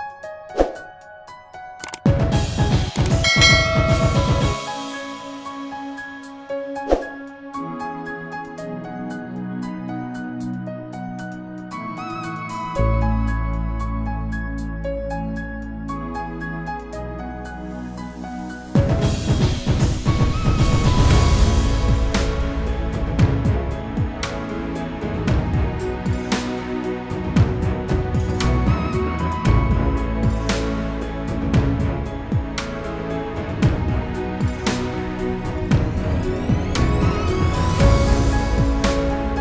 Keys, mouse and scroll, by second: 0.9 click, 3.3 click, 9.7 click, 13.4 click, 16.8 click, 17.1 double click, 18.0 scroll up 1, 18.9 scroll down 1, 19.8 scroll up 1, 22.1 ctrl+click, 25.2 click, 26.3 scroll down 1, 27.3-28.2 scroll down 1, 28.4 scroll down 1, 29.0 click, 31.7 click, 33.0 F4, 33.6 click, 35.4 click, 38.5 click, 38.9 double click.